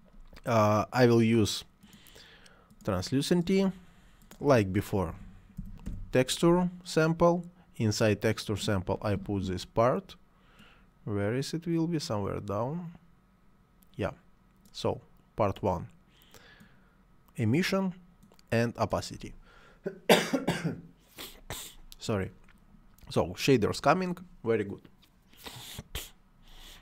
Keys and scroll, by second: 5.1 t, 5.2 e, 5.6 x, 5.9 t.